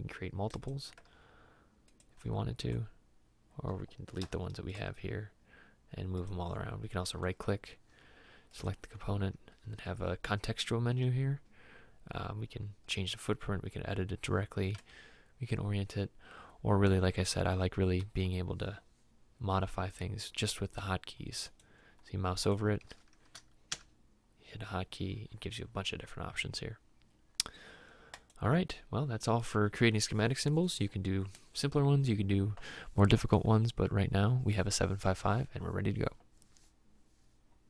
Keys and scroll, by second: 1.0 c, 4.4 Delete, 4.8 Delete, 18.1 Escape, 19.6 m, 23.9 e.